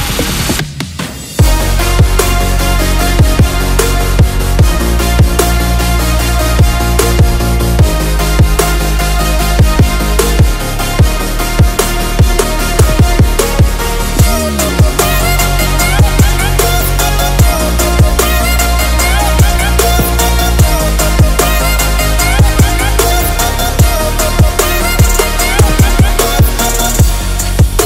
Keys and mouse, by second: 0.0 click, 1.4 ctrl+r, 2.9 click, 7.4 click, 8.1 click, 8.9 alt+click, 10.1 ctrl+b, 13.3 Tab, 14.1 ctrl+s, 14.4 a, 14.5 a, 15.0 drag, 16.0 shift+drag, 16.6-17.8 drag, 18.3-18.8 drag, 19.4-19.7 middle drag, 20.3 shift+middle drag, 21.2 shift+middle drag, 21.9 click, 23.2 click, 24.5-26.8 shift+drag, 27.2 click, 27.7 Tab.